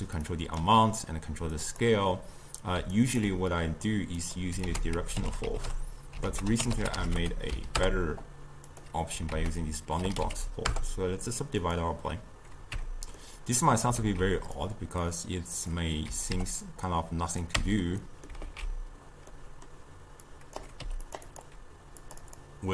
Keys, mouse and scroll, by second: 0.3 click, 1.6-3.0 drag, 3.0-4.2 ctrl+right drag, 4.2 click, 4.7 ctrl+a, 9.4 ctrl+a, 12.8 Tab, 13.2 middle click, 14.0 alt+z, 14.6 click, 16.1 s, 17.6 Tab, 18.0-18.5 middle drag, 18.5 alt+z, 19.4-20.3 middle drag, 20.3-20.9 drag, 20.9 g, 21.3 click, 22.1-22.7 drag.